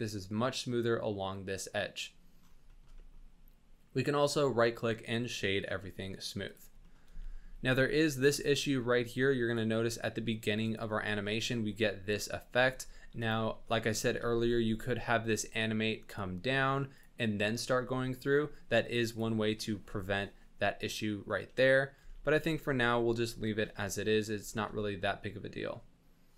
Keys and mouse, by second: 2.7 shift+click, 2.9 drag, 4.2-5.1 drag, 6.4 click, 6.8 shift+middle click, 7.1 space, 7.6 space, 8.5-9.5 drag, 12.6 shift+drag, 13.1 click, 13.6 middle click, 14.2 g, 17.9 middle drag, 19.1 click, 21.0-21.9 middle drag, 22.0 space, 22.4 drag, 23.4 shift+drag, 24.0 middle drag, 24.5 shift+drag, 24.8 drag, 25.0-26.3 middle drag.